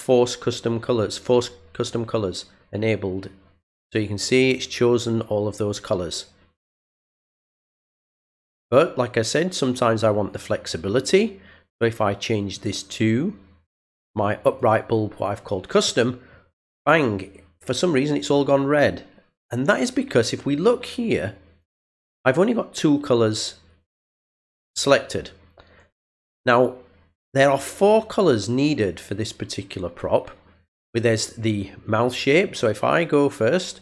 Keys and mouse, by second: 12.5 click, 14.5 click, 31.9 click, 32.5 click.